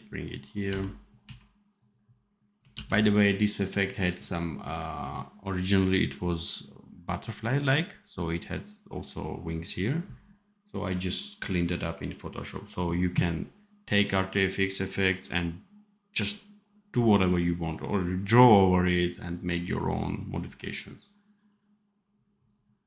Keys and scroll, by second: 1.1 c, 2.7 ctrl+s.